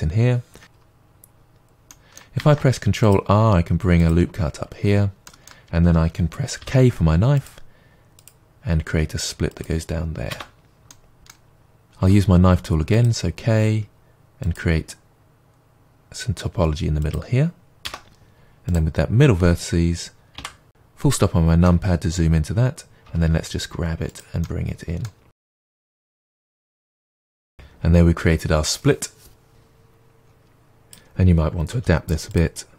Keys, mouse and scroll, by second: 0.6 right click, 0.8-1.3 scroll down 2, 1.3-1.9 scroll down 1, 1.9 middle click, 2.4 ctrl+r, 4.1 click, 4.5-5.2 scroll up 1, 5.2 middle click, 6.6 k, 10.4 Return, 10.9 middle click, 11.5-12.0 scroll up 1, 12.0 k, 17.9 Return, 18.7-20.4 drag, 20.4 KP_Decimal, 21.2-22.8 middle drag, 22.8 scroll down 2, 23.0 middle click, 23.0 g, 24.2 click, 24.4 middle click, 25.3 g, 25.9 click, 26.1 scroll, 26.3 middle click, 26.7 scroll, 27.0 Tab, 27.3-28.7 scroll down 2, 28.7-29.2 middle drag, 29.5-30.0 scroll up 1, 30.8 click, 31.8 g.